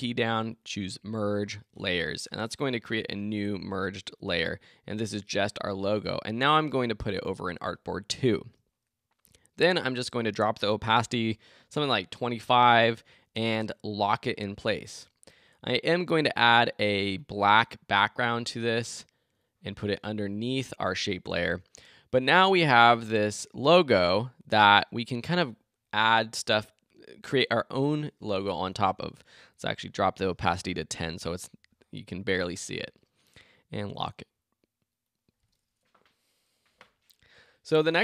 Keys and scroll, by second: 30.6 Return.